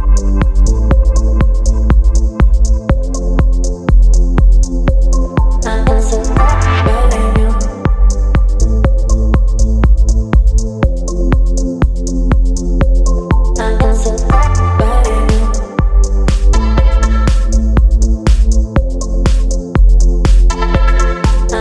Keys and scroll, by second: 3.2 Return, 4.8 space, 9.0 space.